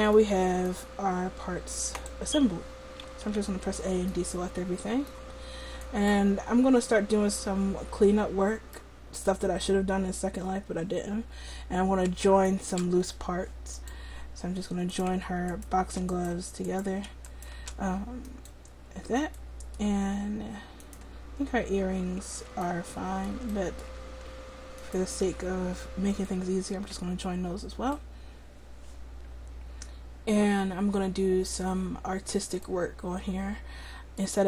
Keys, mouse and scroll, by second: 0.3-2.1 middle drag, 2.1-3.4 drag, 3.4 a, 4.2 middle click, 5.9-7.5 right drag, 7.5 middle click, 12.5-19.4 right drag, 13.8-20.9 drag, 20.9-22.7 right drag, 22.7-24.9 middle drag, 24.9-26.2 right drag, 27.2 click, 28.0-29.7 middle drag, 32.2-32.7 scroll up 1, 32.7-34.4 middle drag.